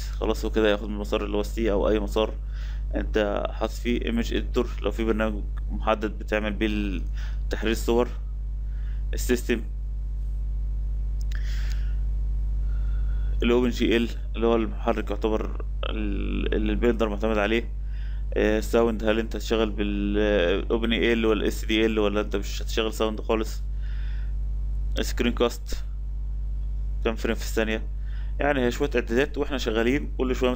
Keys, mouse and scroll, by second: 0.0-8.1 drag.